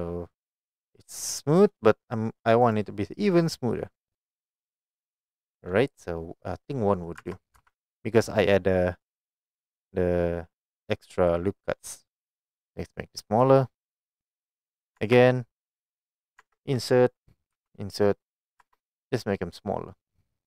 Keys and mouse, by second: 0.5 click, 2.8-4.5 drag, 5.1-5.5 middle drag, 7.3 Tab, 7.6 3, 13.4 i, 14.9 click, 15.0 Tab, 16.5 Tab, 17.7 i, 18.6 click, 18.6 Tab, 19.3-20.4 middle drag.